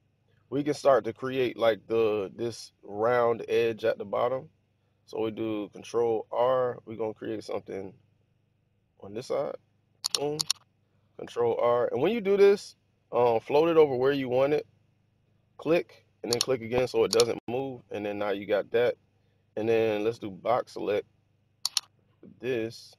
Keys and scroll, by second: 6.2 ctrl+r, 11.2 ctrl+r, 20.0 b.